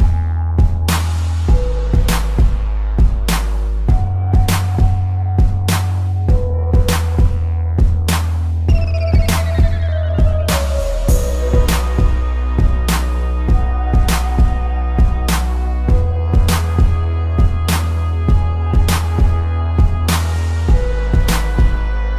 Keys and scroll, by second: 0.2 space, 5.3 space, 10.5 space, 15.2 space, 18.3 space, 19.6 ctrl+-, 20.0 space.